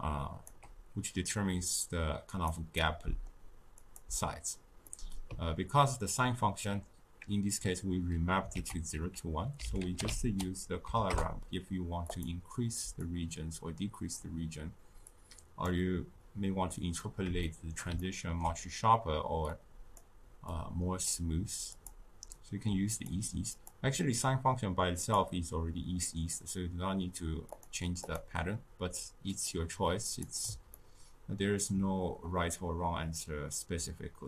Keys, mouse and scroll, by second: 2.4-2.8 drag, 2.8-3.9 middle drag, 3.9-4.9 drag, 4.9-7.9 middle drag, 8.5 ctrl+a, 13.0-17.4 drag, 17.4-19.4 shift+middle drag, 19.4-26.0 drag, 26.0-27.4 middle drag, 27.4 click, 29.3-30.8 drag, 30.8-34.0 ctrl+middle drag.